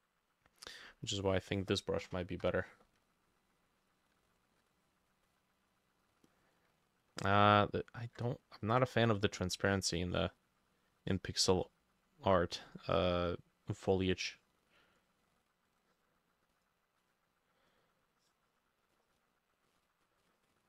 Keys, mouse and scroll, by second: 2.4 Delete, 4.3 shift+click, 8.5 shift+click, 9.1 shift+click.